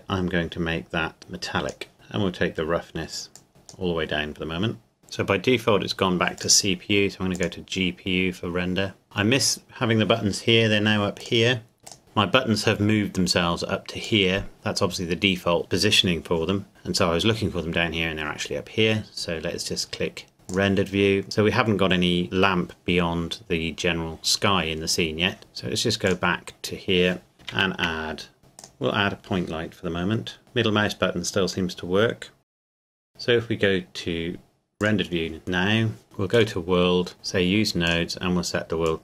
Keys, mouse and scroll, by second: 1.2 click, 3.3 click, 6.4 click, 11.2 click, 11.9 click, 14.0 click, 20.5 click, 26.0 click, 27.5 shift+a, 28.6 click, 30.4 middle click, 32.4 g, 32.4 click, 32.6 middle click, 32.7 g, 32.8 click, 32.8 middle click, 32.9 g, 33.0 middle click, 34.8 click, 36.3 click.